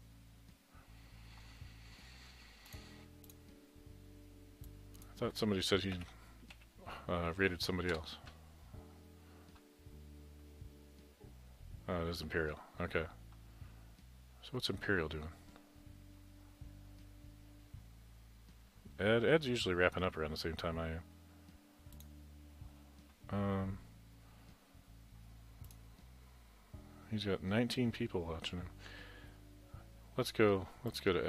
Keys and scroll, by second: 6.0-7.1 typing, 8.0 Return.